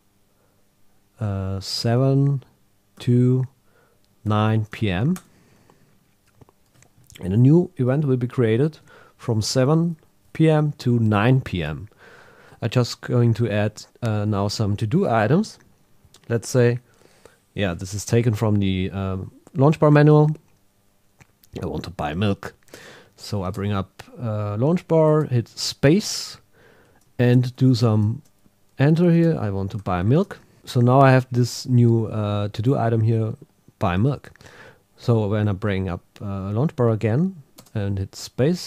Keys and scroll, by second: 5.1 Return, 27.3 shift+b, 30.2 Return.